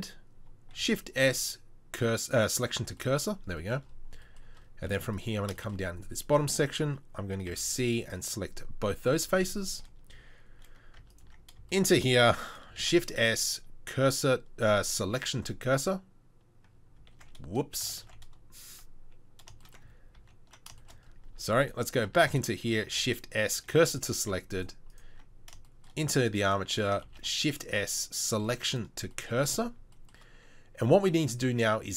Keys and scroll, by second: 0.7 shift+s, 4.9 Tab, 5.4 Tab, 7.5 c, 11.0 Tab, 11.3 Tab, 12.8 shift+s, 17.2 ctrl+s, 18.0 ctrl+s, 20.2 ctrl+z, 21.4 Tab, 22.2 Tab, 22.9 shift+s, 24.7 Tab, 25.2 Tab, 27.1 shift+s.